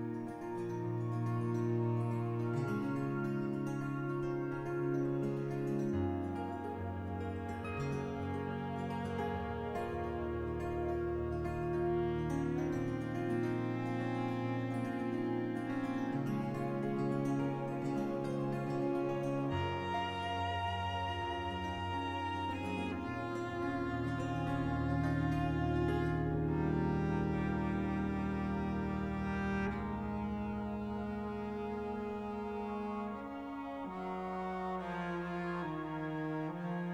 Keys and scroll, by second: 0.6 s, 1.2 s, 3.1 s, 5.9 s, 8.6 1, 12.1 5, 13.7 s, 16.3 s, 19.7 5, 23.4 5, 25.2-28.5 typing, 30.1 3, 33.6 3, 34.6 4, 35.1 5, 36.6 s.